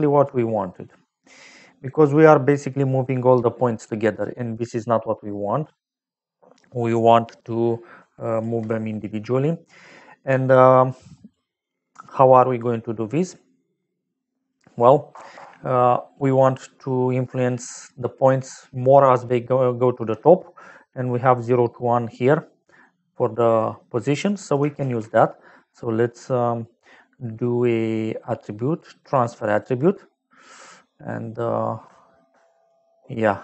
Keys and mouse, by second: 0.8 middle click, 2.6 click, 7.9 click, 8.8 middle click, 10.0 click, 10.6 click, 11.2 click, 12.2 click, 14.4 click, 15.0 KP_0, 15.3 Return, 24.0 click, 24.4 click, 24.7 shift+a, 29.0 click, 29.5 click, 32.3 click.